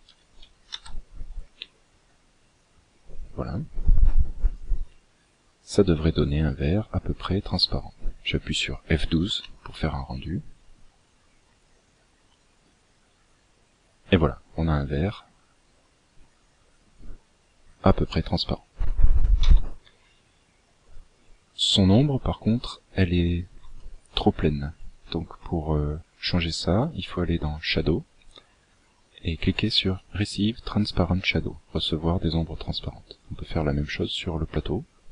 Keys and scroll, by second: 18.3 Escape.